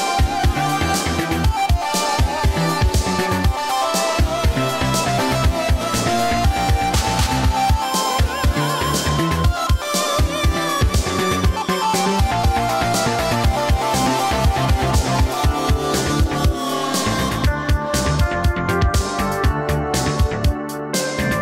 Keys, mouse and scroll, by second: 2.0 click, 4.4 right click, 8.3-9.8 scroll down 1, 9.8 click, 12.9 right click, 13.5 click, 18.4 right click.